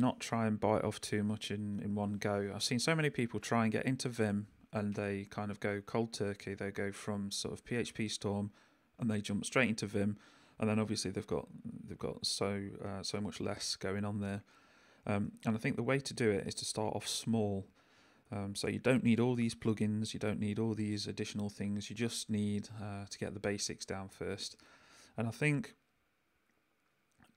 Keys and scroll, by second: 0.2 h, 10.9 j, 16.2 j, 18.2 j, 21.2 k, 24.1 k.